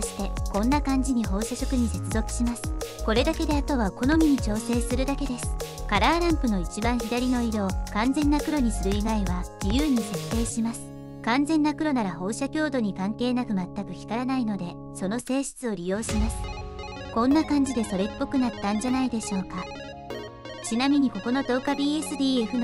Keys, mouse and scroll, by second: 0.3-1.2 drag, 2.9-3.5 drag, 4.8-5.8 drag, 5.9 click, 6.9-8.3 drag, 9.0 click, 9.7 click, 9.9-10.3 drag, 14.3 click, 14.5 click, 14.9 click, 15.2 click, 15.7 click, 16.6 click, 17.0 middle click, 18.6-19.8 drag.